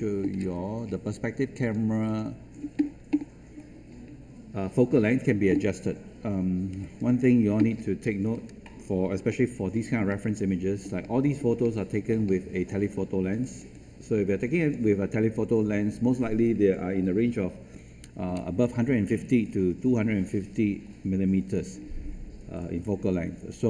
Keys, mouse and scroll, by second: 0.8-1.5 scroll up 1, 1.5 click, 7.7 scroll down 1, 8.2-8.7 scroll up 1, 9.6 alt+middle click, 10.0 middle click, 13.4-23.6 drag.